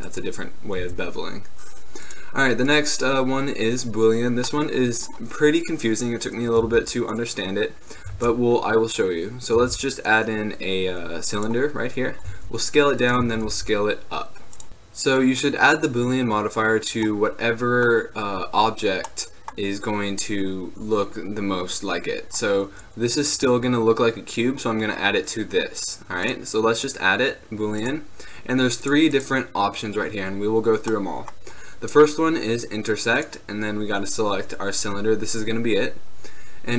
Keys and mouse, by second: 0.9 Tab, 4.6-7.6 drag, 6.8 shift+a, 8.3 shift+a, 9.8 shift+a, 12.4 s, 13.2 click, 13.4 s, 17.2-25.8 middle drag, 29.0-35.9 drag.